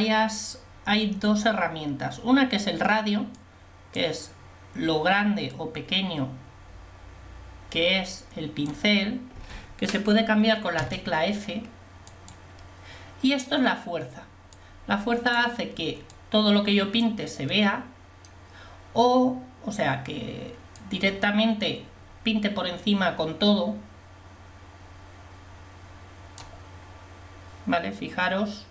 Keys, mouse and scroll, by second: 10.8 f, 17.7 click.